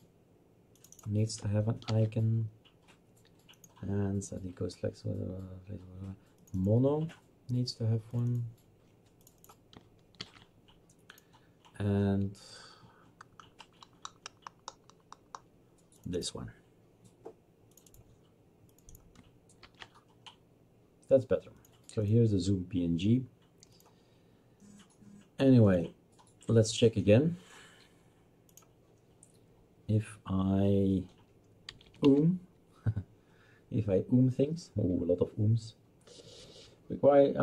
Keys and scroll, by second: 1.9 ctrl+v, 10.2 ctrl+v, 19.6 ctrl+v, 31.5-32.5 typing.